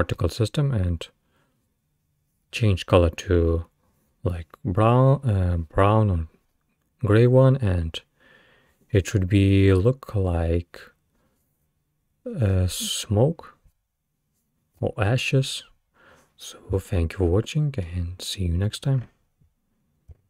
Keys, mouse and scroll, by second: 16.4-16.9 scroll down 3, 16.9-19.9 middle drag.